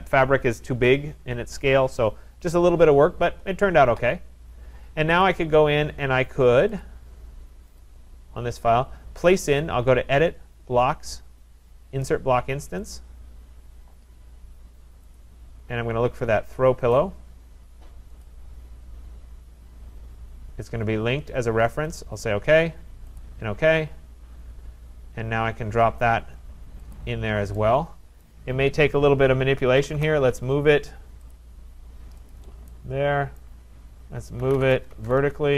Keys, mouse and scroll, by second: 5.3 click, 6.8 click, 7.9 click, 9.4 click, 13.0 click, 15.2 click, 17.0 click, 18.2 click, 23.2 click, 26.9 click, 28.2 right click, 29.4-30.4 typing, 31.4 click, 31.7-32.5 typing, 32.3 click, 33.4 right click, 34.2-35.5 typing.